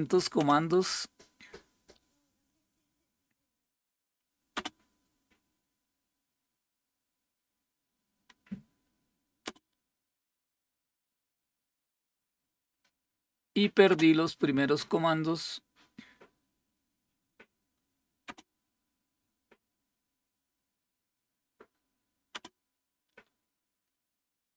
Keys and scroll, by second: 13.9 space.